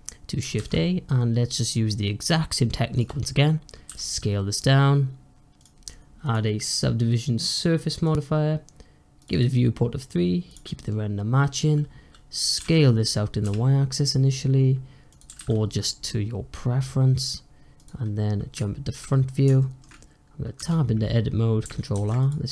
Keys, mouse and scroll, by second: 0.4 shift+a, 3.8 s, 6.1-11.3 drag, 11.3-11.7 scroll up 1, 11.7-12.1 scroll down 1, 12.4 s, 15.1 s, 18.2 scroll up 1, 19.5-20.4 shift+middle drag, 20.4 Tab, 21.8 ctrl+r.